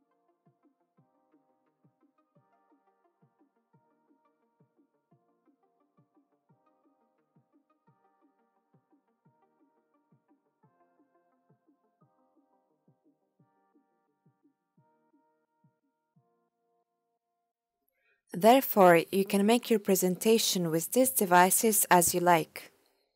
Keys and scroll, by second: 10.2-11.1 typing, 21.4 space.